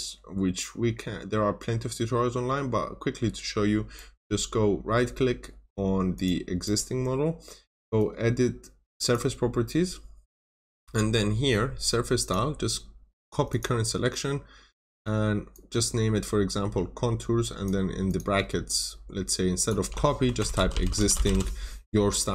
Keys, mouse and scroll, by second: 3.9 right click, 6.1 click, 6.6 right click, 8.9 click, 19.9-21.7 typing.